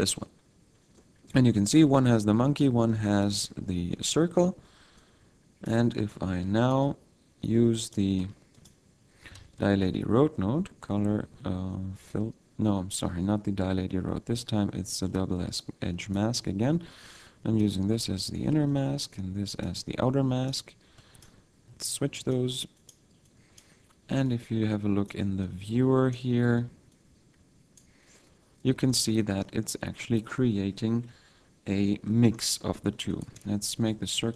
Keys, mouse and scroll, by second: 0.8-1.3 scroll down 2, 1.0 middle click, 1.5 scroll down 1, 2.6 click, 3.3 x, 3.7 scroll down 2, 3.9 middle click, 4.4-4.7 scroll up 1, 4.9 click, 6.6 click, 6.9-7.8 scroll up 5, 7.8 click, 8.2 Tab, 8.5 click, 9.6 shift+a, 15.6 click, 16.9 click, 18.7 click, 21.0 click, 21.8 click, 22.0 click, 22.7 click, 23.3 click, 23.3 click, 24.3 click, 26.9 click, 28.9 middle click, 32.0 middle click, 33.1 right click, 33.8 s.